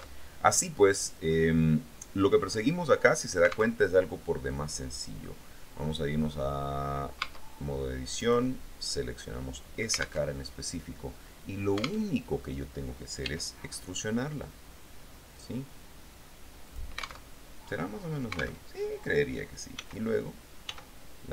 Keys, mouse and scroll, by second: 0.3 alt+Tab, 3.9 alt+Tab, 4.7 click, 7.4 Tab, 8.4 middle click, 9.1-10.2 drag, 10.5 alt+Tab, 12.3 alt+Tab, 13.4 e, 16.9 click, 17.5 alt+Tab, 18.9 alt+Tab, 19.9 s, 20.9 s.